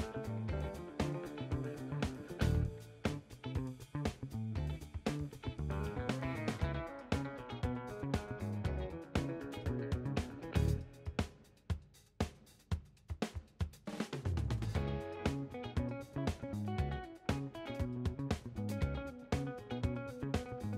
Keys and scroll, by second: 16.5-20.3 typing.